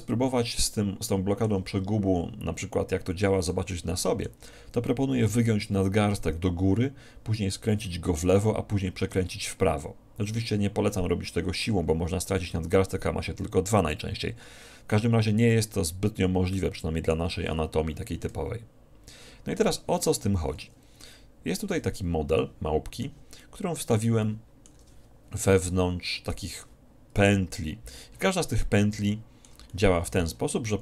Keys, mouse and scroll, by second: 0.7-2.6 middle drag, 3.0 click, 3.8-5.8 middle drag, 12.0-16.6 drag, 16.6-18.5 middle drag, 21.8 2, 22.5 middle click, 23.5-26.0 middle drag, 26.5-28.1 drag, 27.4 KP_1, 28.5-30.8 middle drag.